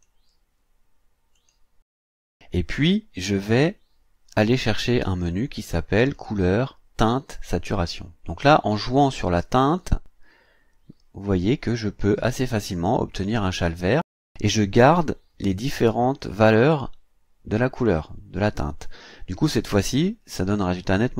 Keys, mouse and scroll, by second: 1.3 click, 6.1 click, 7.5 click, 9.8-13.7 drag.